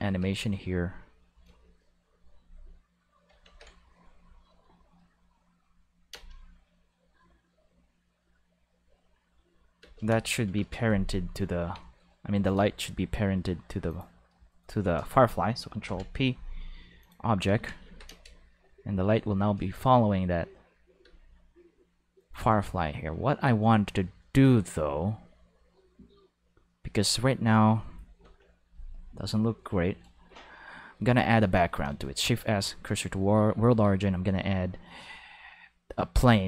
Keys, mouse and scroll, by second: 0.2 space, 0.3 right click, 0.3 5, 3.4 ctrl+s, 3.8 5, 4.7 shift+middle click, 6.1 space, 6.2 5, 9.8 space, 9.9 5, 12.3 right click, 12.9 g, 13.0 5, 13.9 click, 14.5 shift+right click, 15.9 ctrl+b, 15.9 ctrl+5, 17.0 click, 17.5 ctrl+5, 17.8 alt+a, 18.1 space, 21.0 space, 21.2 5, 22.2 right click, 28.2 Home, 28.4 5, 32.0 shift+5, 32.8 click, 33.7 shift+a.